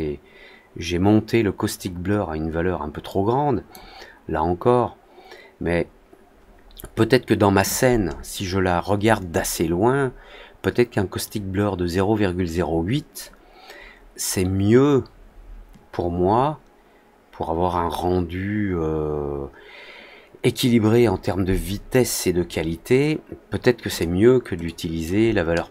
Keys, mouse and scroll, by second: 3.0-3.6 drag, 13.7 middle click, 14.2 middle click, 23.8 click, 24.6 click.